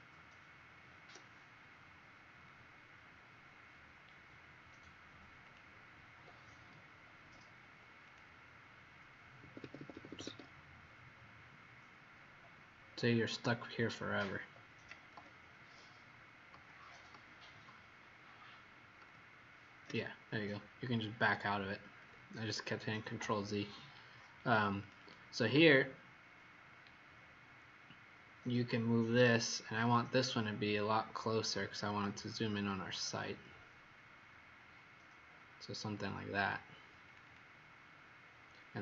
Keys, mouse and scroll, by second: 2.5-3.5 scroll down 3, 3.5 scroll up 1, 5.4 click, 9.4 Escape, 9.5 Escape, 9.7 Escape, 9.9 Escape, 10.1 Escape, 10.2 Escape, 10.5 scroll down 1, 12.1-13.8 scroll down 12, 13.8-14.3 scroll down 1, 15.1 ctrl+z, 15.7 ctrl+z, 16.5 ctrl+z, 17.1 ctrl+z, 17.6 ctrl+z, 18.9 ctrl+z, 21.4-21.8 scroll up 2, 22.1-23.0 scroll up 1, 23.3-23.6 scroll down 1, 24.8 click, 24.9 click, 26.8 scroll up 1, 27.5 middle click, 29.5-31.1 scroll up 5, 31.1 middle click, 32.9-34.2 scroll up 4, 34.2 middle click, 37.0 click, 37.2 click.